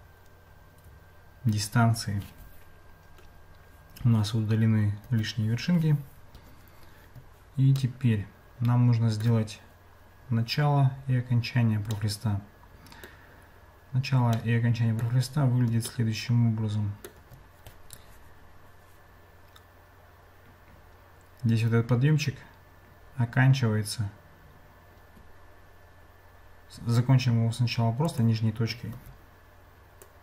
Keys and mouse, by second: 5.1 Tab, 7.8-9.3 middle drag, 12.1-13.1 middle drag, 14.3 middle click, 16.1 shift+middle click, 28.1 click, 28.9 Tab, 30.1 click.